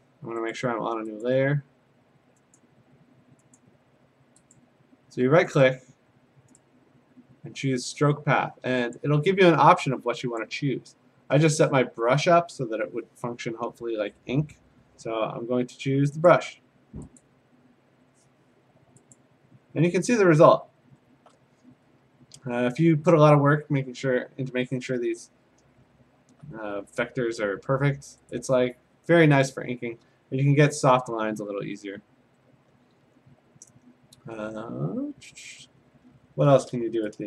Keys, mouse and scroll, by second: 0.5 click, 1.3 click, 2.6 click, 4.3 click, 4.6 click, 5.6 right click, 6.6 right click, 9.0 click, 10.5 click, 16.3 click, 17.2 click, 19.2 click, 19.7-21.1 scroll, 21.1 scroll down 6, 21.9 ctrl+Tab, 23.9 scroll up 2, 24.1-25.5 alt+middle click, 24.2 middle click, 24.3 alt+middle click, 24.4 middle click, 24.8 middle click, 25.2 middle click, 25.3 middle click, 25.4 middle click, 25.5 middle click, 25.8-26.3 scroll, 28.1 scroll down 10, 28.3 click, 30.4-31.0 scroll up 4, 31.0 scroll down 4, 31.2 scroll, 35.4 a, 35.9-36.7 scroll.